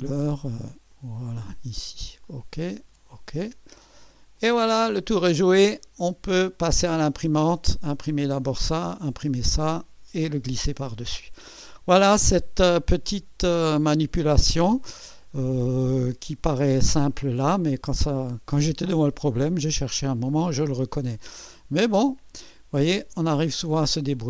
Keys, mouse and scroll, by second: 0.9 click, 2.2 click, 3.1 click, 3.8 click, 4.4-6.4 drag, 6.5 right click, 11.0-15.6 drag, 15.8-23.9 drag.